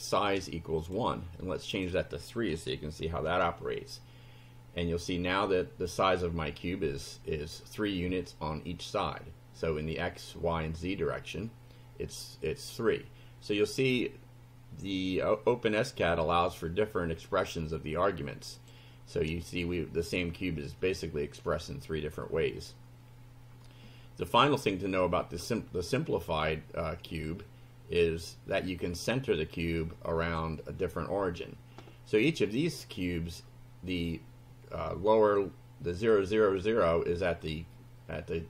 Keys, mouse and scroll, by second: 0.8 click, 1.4 click, 2.5 3, 3.3 F5, 16.5-18.9 drag, 21.5 click, 23.1 scroll down 1, 28.6-30.5 drag.